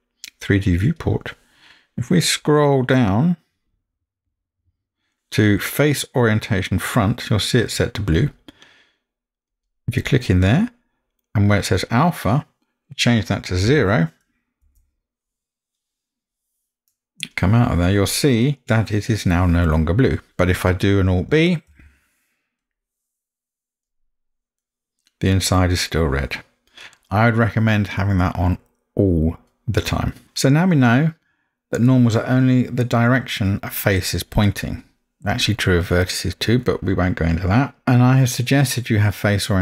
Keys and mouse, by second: 21.7 alt+b, 24.6-29.3 middle drag, 32.0-32.7 middle drag.